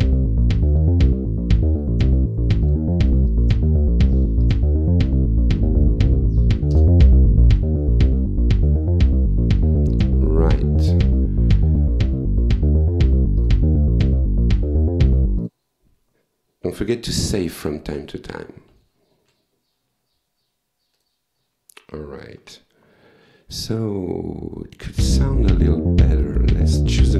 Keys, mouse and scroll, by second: 2.7 click, 3.3-4.5 drag, 5.6 Down, 6.7 Return, 13.4 click, 15.4 click, 18.6 ctrl+s, 21.0 click, 22.3 ctrl+s, 24.9 click.